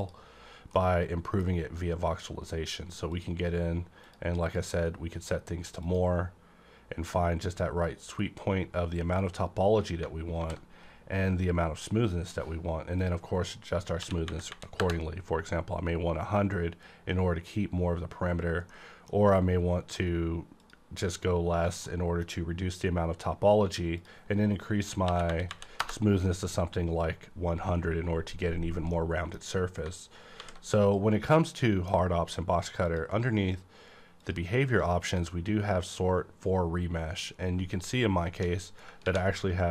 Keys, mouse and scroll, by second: 0.0 click, 0.7-4.0 middle drag, 3.1 click, 4.0 click, 8.2-8.6 scroll up 1, 10.4 alt+v, 13.0 click, 14.0 KP_1, 14.2 KP_0, 14.8 KP_Enter, 16.0-17.8 scroll down 1, 18.7-21.8 middle drag, 20.6 click, 21.8-25.0 middle drag, 23.9 click, 25.0 KP_1, 25.2 KP_0, 25.8 KP_Enter, 28.4-28.9 scroll down 1, 28.9-30.8 middle drag, 30.4 alt+v, 30.8 click, 31.3-34.2 middle drag, 32.8 click, 34.2 click, 39.0 ctrl+`.